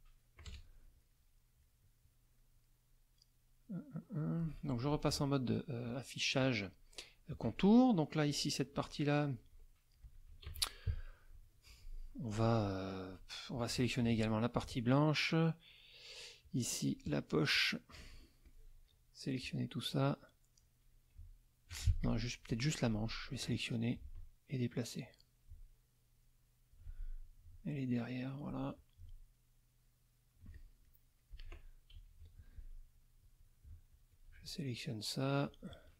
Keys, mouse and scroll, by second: 0.4 KP_Add, 1.1 click, 2.4 click, 3.1 click, 3.7-4.4 scroll up 1, 4.9 ctrl+KP_5, 5.6 ctrl+click, 6.0 click, 6.1 middle click, 7.4 middle click, 8.7 click, 10.4 ctrl+KP_5, 10.9 ctrl+middle click, 12.9 click, 13.7 F2, 14.0 shift+click, 16.4 shift+click, 16.8 shift+click, 17.5 shift+click, 18.4 shift+click, 20.6-21.9 drag, 21.9 ctrl+alt+z, 22.0 ctrl+alt+click, 22.5 ctrl+alt+click, 23.2 click, 25.0-26.9 drag, 27.7 alt+click, 28.7-30.8 alt+drag, 30.8 alt+middle click, 31.9 ctrl+KP_5, 33.2 click, 33.9 shift+click, 35.4 shift+click.